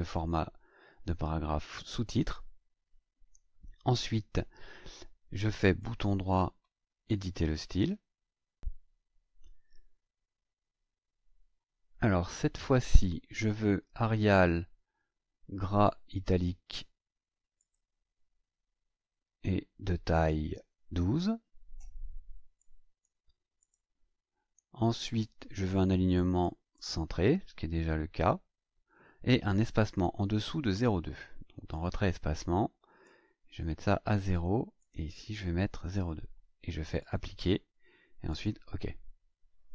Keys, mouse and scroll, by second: 5.6 right click, 7.0 click, 17.5 click, 22.5 click, 23.6 click, 26.1 click, 26.7 click, 31.7 click, 33.0 click, 34.2 KP_0, 34.8 click, 35.7 BackSpace, 36.9 click, 38.3 click.